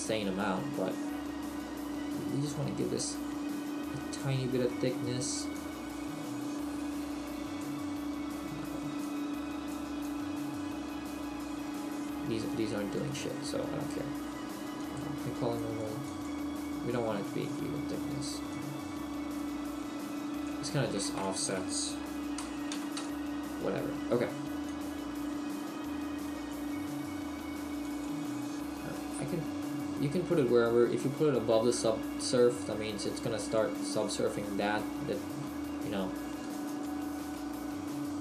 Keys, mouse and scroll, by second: 5.6 click, 9.0 click, 14.9 click, 18.5 click, 21.1 click, 24.7 click, 27.9 click, 29.0 middle click, 33.5 click, 34.8 middle click, 36.5 click, 36.8 click, 37.4 middle click.